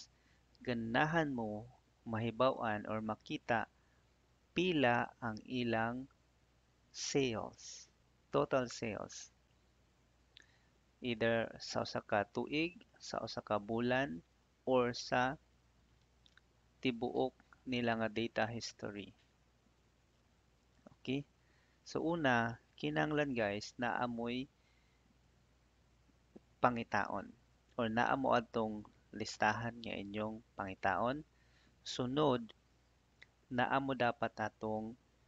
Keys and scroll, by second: 21.3 Down, 23.1 Left.